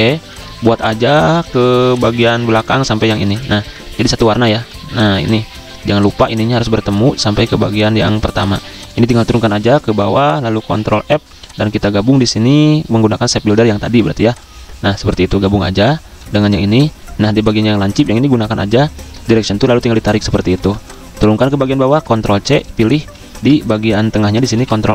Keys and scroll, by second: 3.6 v, 4.5 v, 7.9 v, 9.4 ctrl+x, 10.7 ctrl+f, 16.4 v, 17.7 a, 20.7 v, 21.7 ctrl+x, 23.2 ctrl+alt+2, 24.4 ctrl+f.